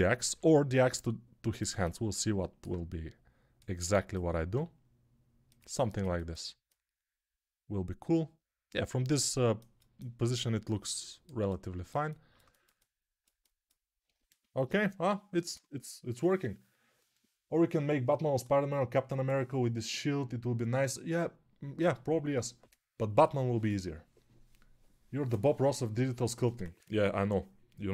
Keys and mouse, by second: 0.1 g, 4.4-5.5 right drag, 4.4 g, 5.5-27.5 alt+middle drag.